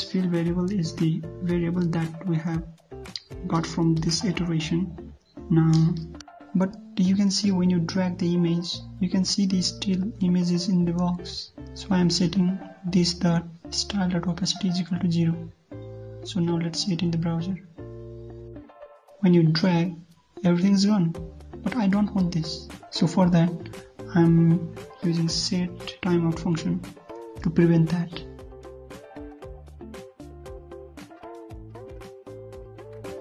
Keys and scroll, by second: 2.7 ctrl+v, 4.8 ctrl+s, 17.9 ctrl+s, 18.5 alt+Tab, 18.7 ctrl+F5.